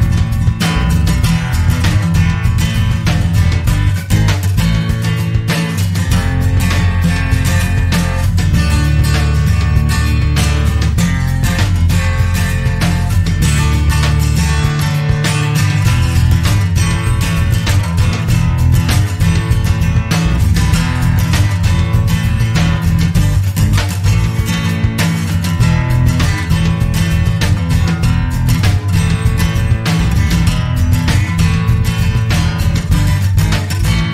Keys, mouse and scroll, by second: 2.3 t, 2.8 a, 3.2 n, 4.0 k, 5.5 click, 8.9-9.6 drag, 10.3-11.0 drag, 11.7 click, 14.9 click, 16.7 click, 18.2 click, 20.2-21.5 drag, 22.2 click, 24.7 click, 27.1 click, 29.7 click, 31.6-34.0 drag.